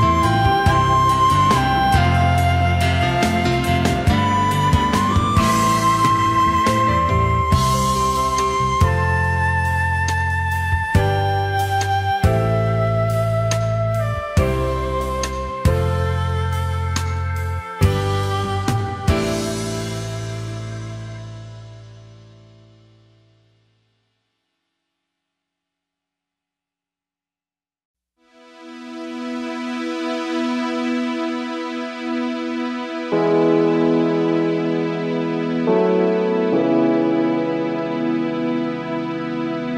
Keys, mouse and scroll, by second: 1.0 space, 4.8 space, 7.6 space, 10.6 space, 16.2 ctrl+z, 18.7 alt+scroll up 1, 20.0 space, 26.4 alt+scroll up 1, 28.1 space, 30.9 ctrl+z, 37.8 alt+scroll down 1, 38.0 space.